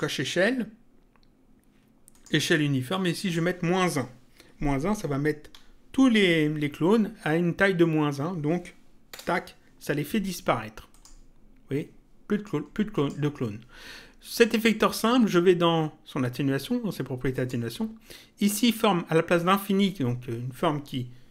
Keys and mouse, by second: 2.0 click, 9.0 Return, 10.8 click, 12.9 click, 17.3 click.